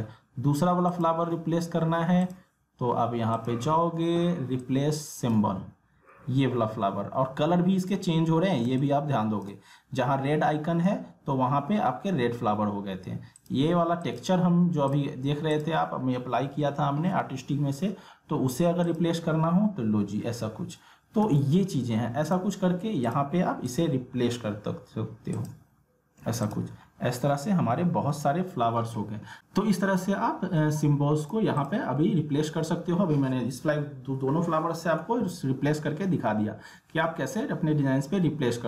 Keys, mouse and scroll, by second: 0.9 click, 6.2 alt+scroll down 1, 6.7 alt+scroll up 1, 8.1 alt+scroll down 1, 8.6 space, 8.8 click, 9.2 space, 10.9 ctrl+z, 13.4 click, 18.8 click, 21.2 ctrl+z, 22.2 click, 26.8 alt+scroll up 1, 27.2 alt+scroll down 1, 27.8 alt+scroll up 1, 29.4 click, 30.7 ctrl+z, 31.2 click.